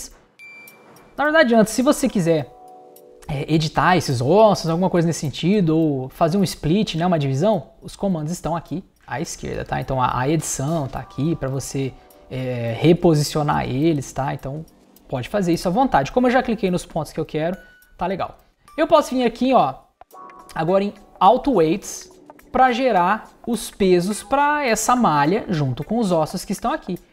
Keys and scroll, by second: 14.0 super+z.